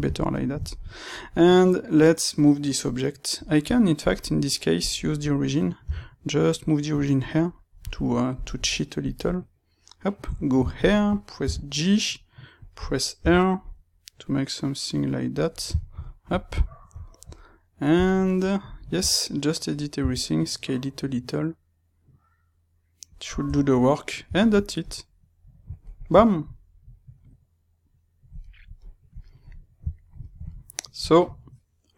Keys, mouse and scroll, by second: 3.9-7.2 drag, 5.8 g, 8.3-10.7 drag, 10.2 KP_3, 10.7-12.6 shift+middle drag, 11.4 g, 12.6 click, 13.1 r, 15.3 click, 15.7-23.1 shift+middle drag, 18.9 Tab, 23.1 click, 23.4 Tab, 23.7-31.9 middle drag.